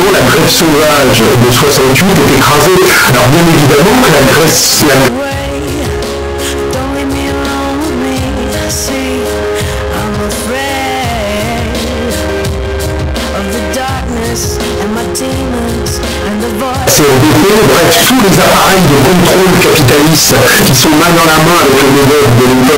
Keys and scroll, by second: 5.1 Page_Down.